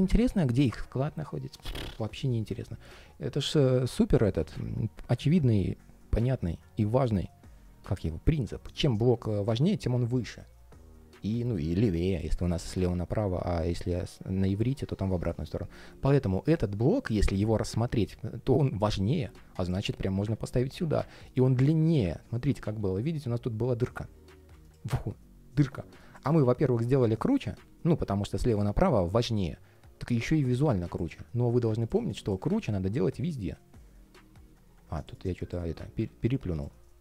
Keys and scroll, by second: 22.3 super+z, 26.1 shift+super+z.